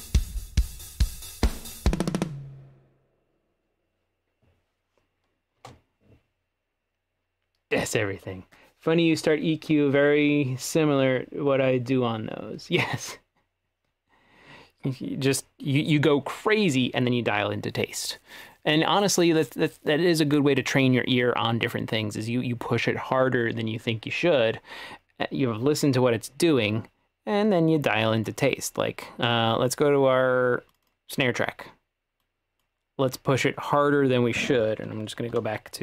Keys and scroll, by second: 5.6 space.